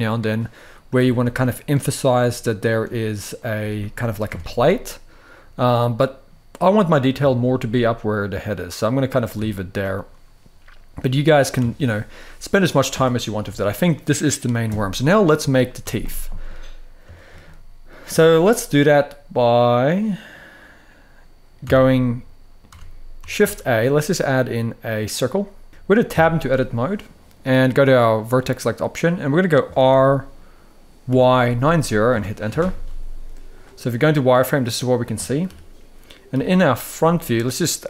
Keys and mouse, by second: 0.5 middle click, 0.9 ctrl+r, 3.1 click, 3.3 s, 3.8 click, 4.2 Tab, 4.4-6.0 middle drag, 7.0 shift+middle drag, 7.4-8.9 middle drag, 9.1 Tab, 11.3 Tab, 11.6-12.5 middle drag, 13.2 KP_1, 15.9 shift+middle click, 16.9 shift+middle drag, 17.1-17.7 middle drag, 17.9 shift+middle drag, 18.4-20.0 middle drag, 21.4 Tab, 21.7 middle click, 22.4 Tab, 23.1 shift+a, 25.7 r, 25.7 x, 25.7 9, 25.7 0, 25.8 Tab, 26.3 middle click, 28.1 click, 29.5 r, 30.8 y, 31.1 9, 31.2 0, 31.8 Return, 32.2 z, 33.6-34.7 middle drag, 35.2 KP_3, 36.0 KP_1.